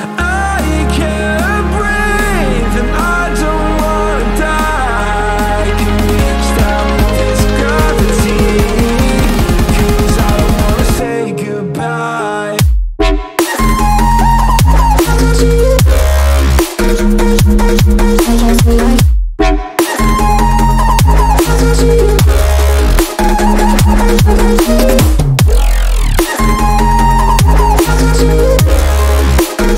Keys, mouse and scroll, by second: 8.6-15.6 drag, 17.9 click, 29.2 g.